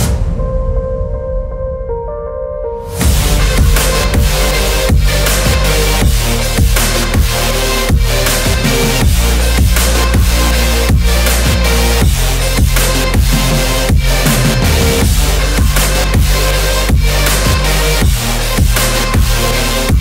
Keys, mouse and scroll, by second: 0.6-1.1 shift+middle drag, 1.5-1.9 middle drag, 2.3 shift+middle drag, 2.9 click, 3.4 middle click, 4.8 Tab, 6.1 click, 6.7 Tab, 8.4 click, 9.0 click, 11.0-12.0 drag, 12.6 scroll up 1, 12.8 click, 14.8 drag, 15.3 middle click, 15.8 Tab, 16.6-17.2 scroll up 1, 17.2 middle click, 17.9 click, 18.5 shift+click, 19.0 shift+click, 19.9 shift+click.